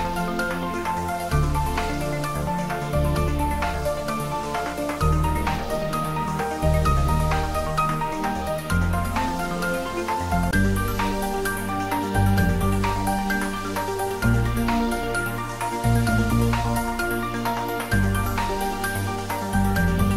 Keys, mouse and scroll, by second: 1.6 click, 2.9-3.4 scroll down 1, 4.1 shift+a, 7.6 click, 10.1 g, 10.5 z, 12.0 click, 14.0 scroll down 1, 16.6 click, 17.4-19.3 scroll down 1.